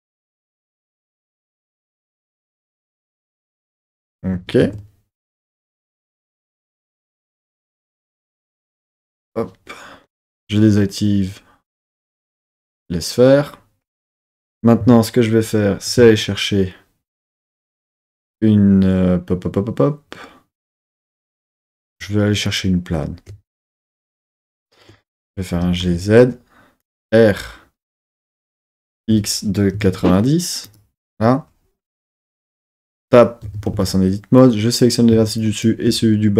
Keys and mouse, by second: 1.0 KP_1, 1.7 KP_3, 2.9 KP_1, 4.3 KP_1, 4.6 KP_3, 8.9 KP_1, 12.7 click, 16.0 shift+a, 23.7 super+middle click, 24.0 super+middle click, 25.5 g, 25.8 z, 26.8 click, 28.1 r, 29.0 x, 29.7 KP_9, 29.8 KP_0, 30.6 click, 31.0 Tab, 32.0 KP_1, 32.6 Tab, 33.4 Tab, 33.7 1, 34.4 click, 35.4 shift+click.